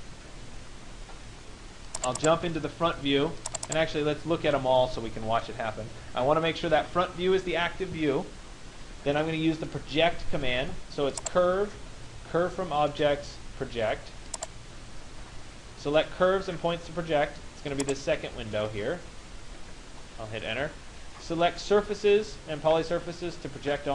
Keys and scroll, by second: 20.2 Return.